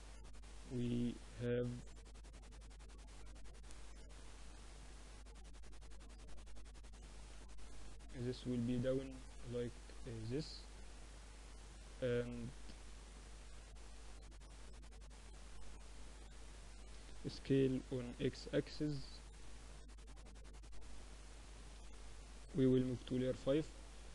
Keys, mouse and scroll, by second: 3.4 a, 6.3 b, 7.6-9.5 drag, 9.5 Tab, 11.8-13.0 middle drag, 11.8 z, 16.2 s, 20.7 m, 23.0-24.1 drag.